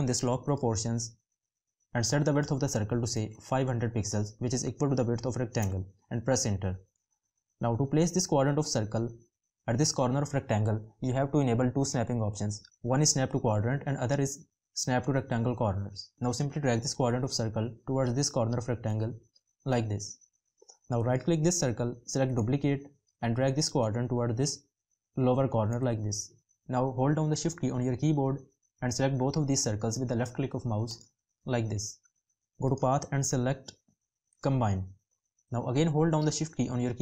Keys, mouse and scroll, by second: 26.7 shift+click, 36.0 shift+click.